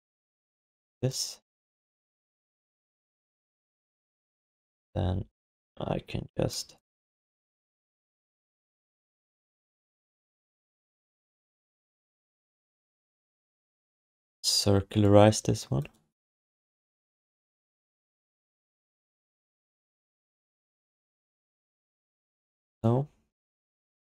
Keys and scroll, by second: 2.6 alt+shift+d, 4.8 r, 18.2 w, 19.2 v, 20.9 f, 21.8 e.